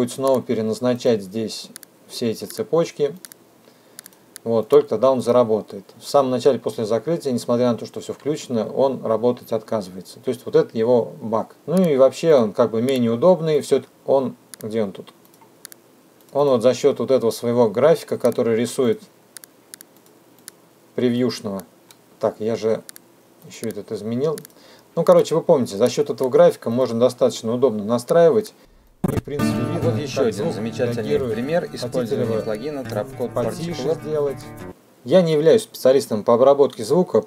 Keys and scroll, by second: 21.2 space, 28.1 space, 34.7 F2.